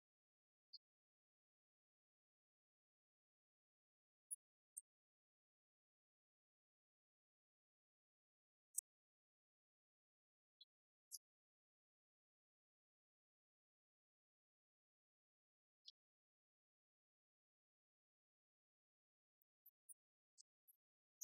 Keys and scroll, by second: 1.4 Right, 3.3 alt+Down, 4.7 Escape, 4.9 Right, 6.3 Left, 6.6 Right, 8.5 Left, 8.8 Right, 9.7 Left, 11.2 alt+Down, 12.2 Return, 13.6 Right, 13.9 Left, 14.1 Down, 15.0 ctrl+s, 15.9 ctrl+d, 16.6 Right, 17.4 Left.